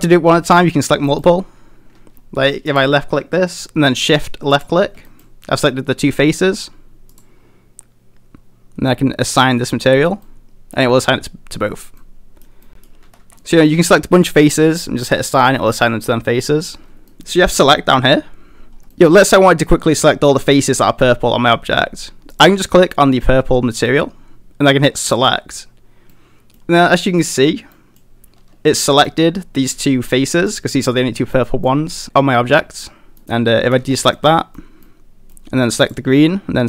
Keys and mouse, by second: 1.0 middle click, 4.5 shift+click, 5.1 middle click, 7.1 click, 9.4 click, 10.3 middle click, 12.0 middle click, 12.6 middle click, 13.0 a, 13.2 a, 13.4 middle click, 15.7 middle click, 16.4 middle click, 17.1 middle click, 18.9 middle click, 22.3 click, 25.0 click, 26.1 middle click, 27.7 middle click, 28.9 middle click, 30.5 middle click, 31.3 middle click, 32.6 middle click, 33.2 middle click, 33.6 a, 33.8 a, 34.1 middle click, 34.8 middle click, 35.8 click.